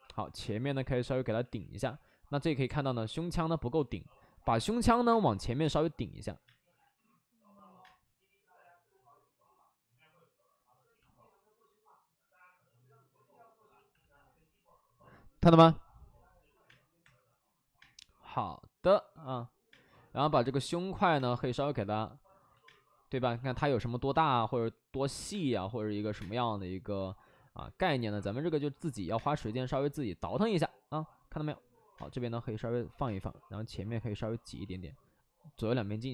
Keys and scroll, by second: 0.3 space, 1.4 alt+s, 1.8 alt+s, 2.5 alt+s, 3.6 ctrl+z, 5.0 space, 5.5 space, 6.4 space, 6.7 ctrl+z, 7.7 space, 13.9 alt+s, 16.6 space, 17.7 space, 17.7 3, 19.8 space, 21.1 space, 22.4 ctrl+z, 22.5 space, 24.0 space, 25.1 alt+s, 25.2 space, 26.1 space, 26.9 alt+s, 29.1 space, 31.9 space, 32.8 space, 33.0 space.